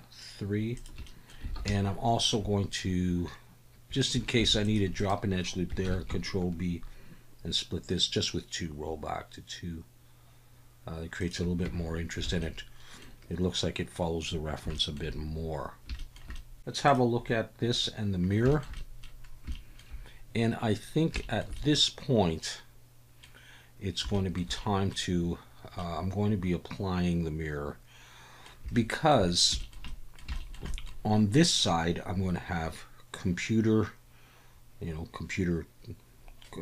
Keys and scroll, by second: 1.5 alt+a, 4.4 ctrl+r, 5.8 ctrl+b, 11.6 Tab, 12.2 alt+a.